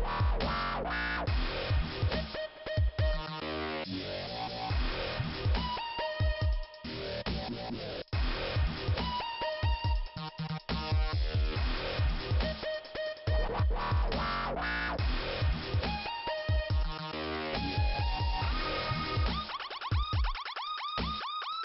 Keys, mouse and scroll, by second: 5.3 click, 6.6 click, 8.6 click, 10.8 click, 14.9 click, 17.0 click, 18.6 click, 19.5 click, 19.6 click, 19.7 double click, 19.9 double click, 20.1 double click, 20.2 double click, 21.1 double click.